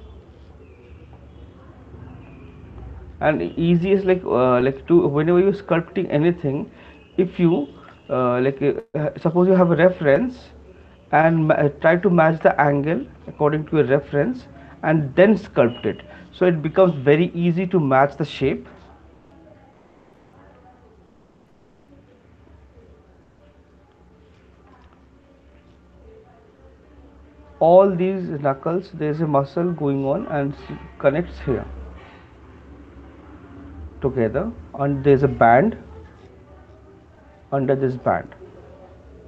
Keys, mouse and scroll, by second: 0.4 click, 3.3 click, 4.7 shift+click, 5.8 right click, 7.1 alt+click, 8.0 right click, 9.1 click, 10.2 right click, 10.2 alt+click, 11.0 click, 12.5 right click, 13.0 alt+click, 14.3 click, 19.1 ], 22.2 click, 22.6 click, 23.2 click, 25.8 click, 31.6 click, 32.2 click, 33.6 click, 33.7 click, 35.7 ], 36.1 ], 36.7 ], 37.5 click.